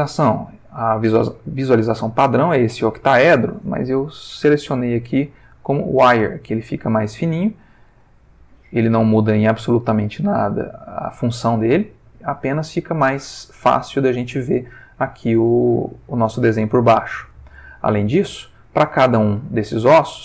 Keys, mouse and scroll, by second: 3.8 click, 5.7 click, 7.1 click, 7.9 r, 9.5 click, 10.2 click, 10.7 r, 12.2 click, 13.0 click, 13.7 r, 14.6 click, 15.3 click, 15.5 r, 18.1 click, 18.6 ctrl+middle click, 19.5 shift+middle click.